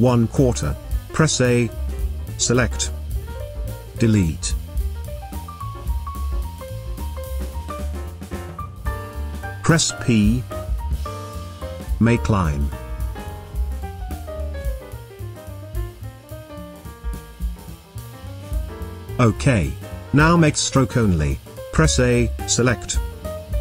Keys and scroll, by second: 0.9 a, 4.0 Delete, 7.3 Delete, 9.9 p, 17.2 v, 19.4 space, 21.6 a.